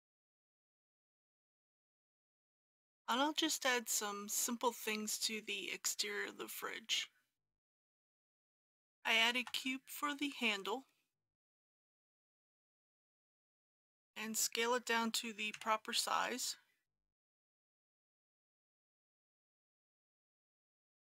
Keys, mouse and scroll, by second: 1.5 click, 2.2 middle click, 8.1 click, 9.3 shift+a, 12.1 click, 13.9 g, 15.6 s, 18.4 click, 18.8 s, 18.9 x, 19.6 click, 20.1 middle click, 20.3-21.0 typing, 20.8 click.